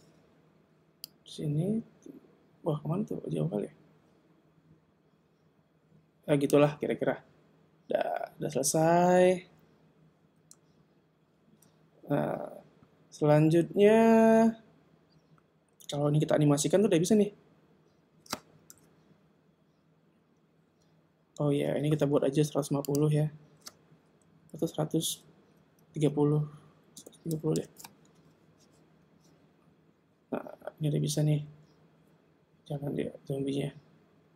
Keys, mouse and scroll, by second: 1.1 click, 18.7 KP_0, 20.7 alt+a, 21.6 Escape, 22.9 click, 29.2 alt+a.